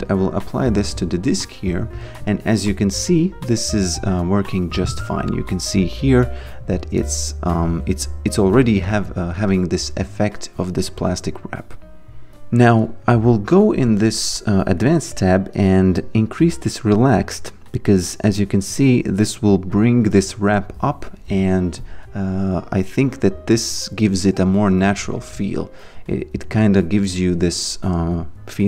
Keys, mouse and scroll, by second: 9.5 alt+click, 12.3 click, 13.1 click, 16.3 click.